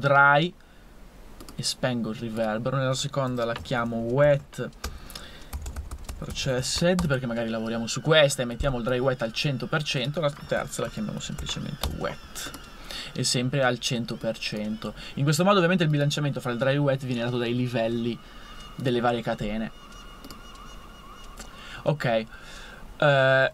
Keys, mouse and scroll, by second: 3.3 super+r, 3.5-7.1 typing, 10.6 super+r, 11.0 super+w, 11.2 super+e.